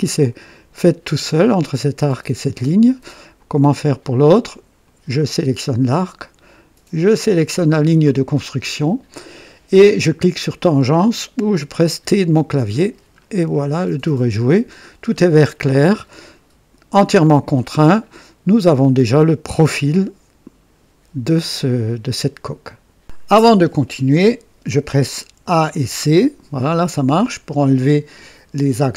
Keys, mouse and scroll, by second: 4.8 click, 7.2 click, 12.0 typing, 13.2-13.6 scroll down 2, 13.8 scroll down 2, 14.3-15.0 right drag, 15.1 scroll down 1, 15.7 right click, 17.5 scroll down 1, 18.1-18.8 right drag, 18.7 typing, 25.2-26.3 typing.